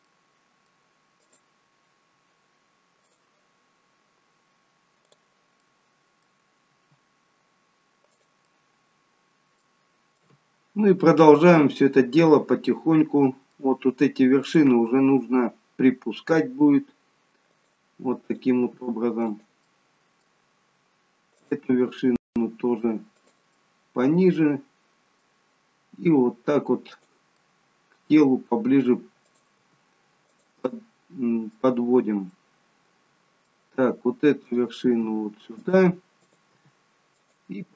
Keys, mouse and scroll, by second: 0.2 middle click, 1.4 click, 5.2 click, 5.8 middle click, 6.8 g, 8.6 middle click, 10.3 middle click, 14.5 click, 16.7 g, 18.4 click, 18.7 g, 19.8 middle click, 21.4 click, 21.8 g, 23.4 middle click, 25.8 g, 27.3 middle click, 29.4 click, 29.5 g, 30.6 middle click, 32.2 middle click, 34.4 click, 34.7 g, 36.1 click, 36.4 g.